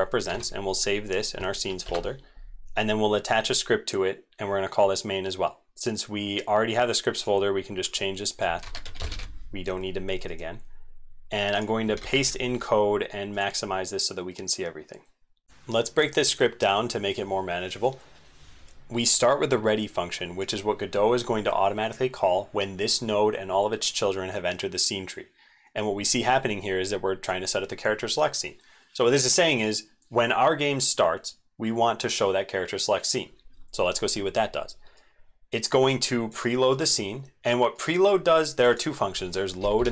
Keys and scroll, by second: 0.3 ctrl+s, 11.9 ctrl+a, 12.1 ctrl+v.